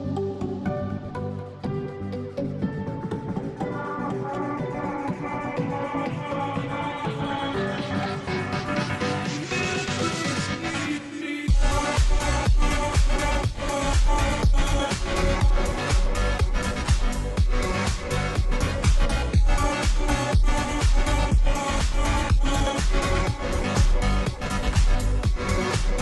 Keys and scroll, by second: 1.1 ], 1.2 ], 2.7 ], 2.8 ], 3.8 ], 3.9 ], 5.0 ], 5.2 ], 9.1 ctrl+t.